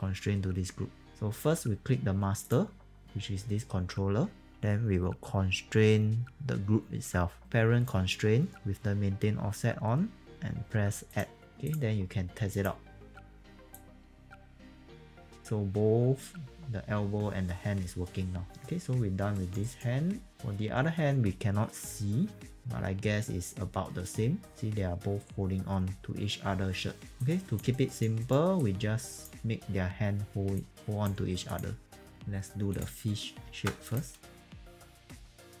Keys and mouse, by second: 2.4 click, 7.4 click, 11.1 click, 13.0 e, 13.7 click, 19.4 alt+right click, 19.6 alt+right click, 21.9 click, 26.0 click, 27.2 alt+click, 27.7 alt+right click, 28.2 alt+right click, 28.6 alt+click, 30.6 alt+click, 31.5 click, 31.7-32.6 typing, 32.7 click, 33.9 ctrl+shift+click, 34.4 click, 34.5 middle click, 34.8 alt+right click, 35.0 click, 35.2-35.6 typing, 35.5 click.